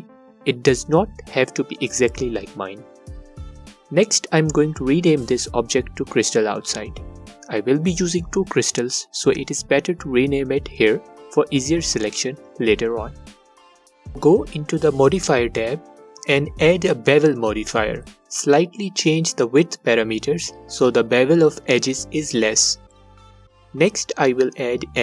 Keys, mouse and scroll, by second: 6.3 Return, 9.6 Tab, 13.9 click, 16.8-23.6 drag.